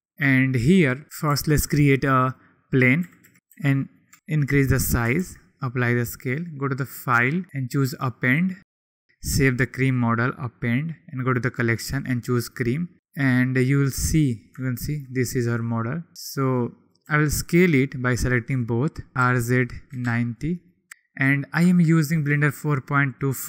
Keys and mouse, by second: 1.3 shift+a, 3.0 s, 3.2 x, 3.9 click, 3.9 s, 4.3 ctrl+z, 5.2 ctrl+a, 6.9-7.7 drag, 14.7 shift+click, 16.2 shift+click, 17.0 s, 18.5-18.9 drag, 19.1 r, 19.4 z, 19.9 9, 20.3 click, 20.3 0, 21.7 shift+middle click.